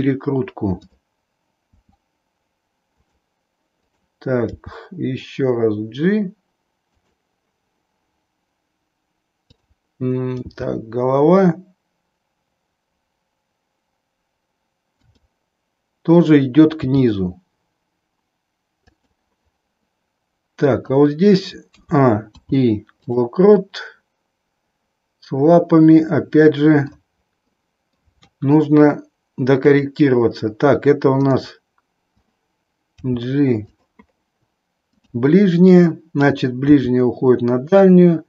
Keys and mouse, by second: 2.0 r, 3.8 click, 5.0 g, 10.5 g, 15.1 click, 16.8 g, 21.6 a, 22.4 i, 23.5-27.0 middle drag, 27.6 middle click, 28.2 KP_3, 29.6-30.6 drag, 32.8 g, 34.8 click, 36.5 g.